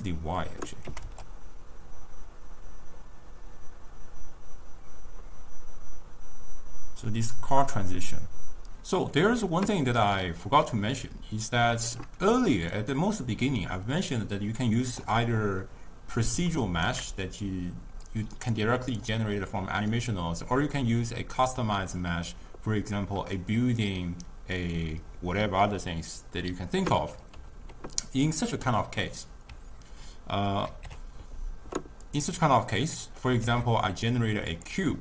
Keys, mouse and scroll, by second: 0.9 g, 10.6-12.4 middle drag, 12.4 click, 13.0-16.4 middle drag, 16.4-18.1 shift+right drag, 18.1 click, 19.3-30.8 middle drag, 30.8 ctrl+a, 32.6-33.5 middle drag, 33.5 shift+a.